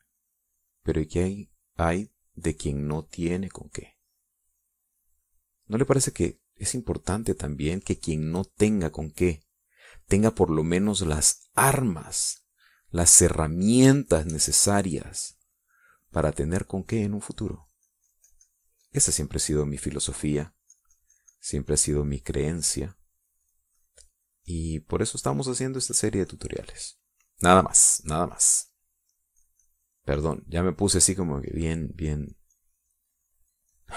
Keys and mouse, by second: 5.4 middle click, 6.1 middle click, 7.1-10.0 drag, 11.2-13.3 drag, 13.6 middle click, 14.1 middle click, 14.9 shift+click, 15.5-16.6 shift+drag, 16.6-20.4 shift+drag, 20.5 shift+middle click, 21.4 click, 21.7-23.6 drag, 24.2 click, 24.8-29.6 drag, 29.8 middle click, 30.4-32.1 drag, 32.2 click, 33.3 click.